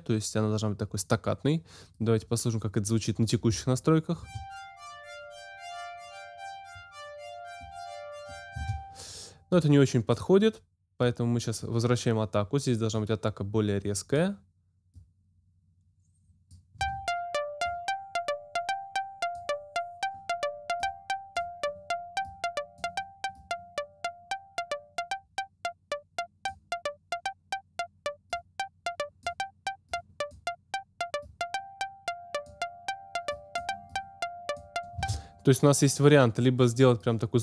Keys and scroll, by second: 4.2 space, 8.5 space, 16.8 space, 35.0 space.